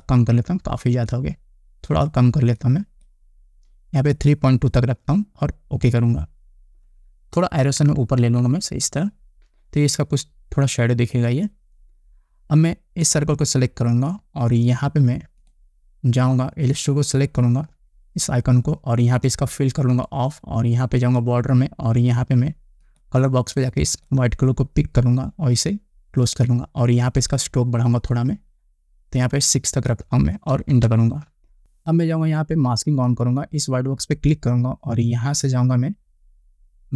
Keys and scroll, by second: 8.3 Up, 31.2 Return.